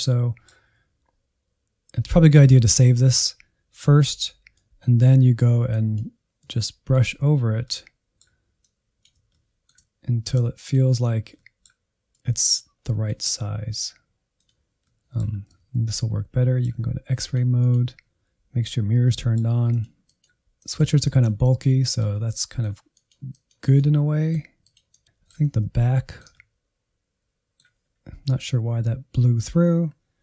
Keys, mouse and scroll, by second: 0.1-4.6 shift+middle drag, 4.6-7.8 drag, 7.8 middle click, 8.7 click, 9.4-10.5 shift+middle drag, 10.5 click, 11.1 scroll down 3, 11.5 middle click, 12.3-14.9 drag, 14.9 middle click, 15.4 scroll up 1, 15.6 alt+z, 16.0-17.2 middle drag, 17.2-19.1 drag, 19.1 middle click, 19.7 click, 20.4-21.4 middle drag, 21.4 click, 22.1 middle click, 22.4 click, 22.8 middle click, 23.1 click, 23.4 middle click, 23.7 click, 24.0 middle click, 24.2 click, 24.5 scroll down 1, 24.6 middle click, 25.4 alt+z, 25.8-27.8 shift+middle drag, 27.8-30.2 scroll up 1.